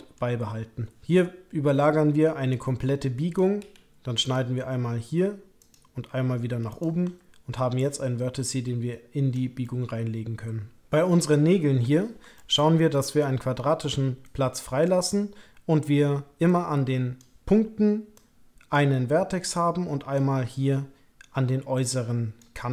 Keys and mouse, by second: 1.0-3.3 drag, 1.0 k, 3.6 k, 9.6 click, 9.9-11.2 middle drag, 12.3 shift+middle click, 14.2 click, 16.4 click, 18.1 click, 19.5 click, 21.7 click.